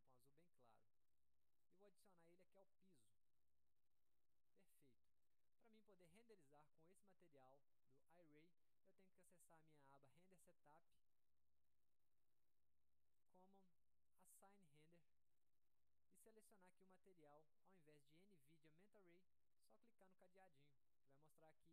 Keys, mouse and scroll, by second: 0.5 click, 1.4 click, 1.8 click, 3.0 click, 5.5-6.0 drag, 7.6 drag, 8.1 click, 10.4 click, 13.4 click, 14.3 click, 15.5 click, 20.6 click.